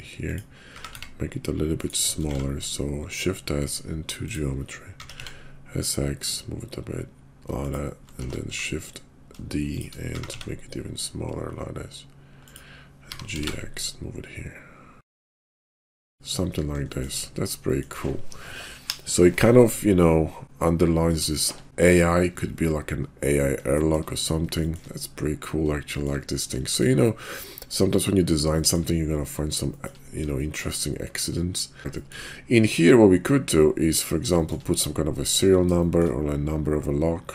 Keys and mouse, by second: 0.7 s, 2.2 shift+s, 5.0 s, 8.3 shift+d, 10.0 s, 12.9 g, 15.5 shift+s, 16.1 click, 16.9 shift+middle drag, 17.7 shift+middle drag, 21.3 shift+middle drag, 23.7-24.0 shift+middle drag, 24.6 shift+click, 25.9 shift+click, 26.6 shift+click, 28.5 shift+click, 29.7 shift+drag, 30.4 shift+drag, 32.1 shift+click, 34.4 shift+click, 35.7 shift+click.